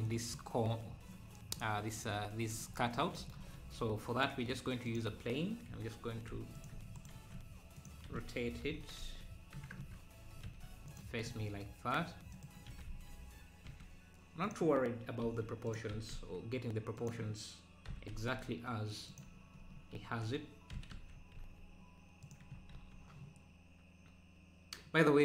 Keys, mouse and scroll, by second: 0.0 middle click, 0.9-1.3 scroll up 1, 3.5 shift+a, 6.3 x, 7.0 shift+right click, 7.1 shift+a, 8.8 r, 11.3 s, 12.7 s, 13.4 s, 15.9 s, 17.9 g, 19.7 scroll up 2, 20.7 g, 22.8 ctrl+s.